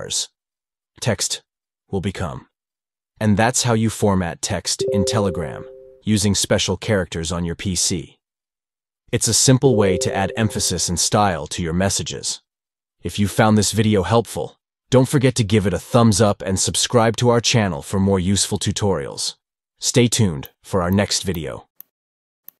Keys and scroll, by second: 1.4 shift+`, 1.7 shift+`, 3.5 shift+`, 4.0 shift+`, 6.2 shift+\, 6.4 shift+\, 8.5 shift+\, 8.7 shift+\.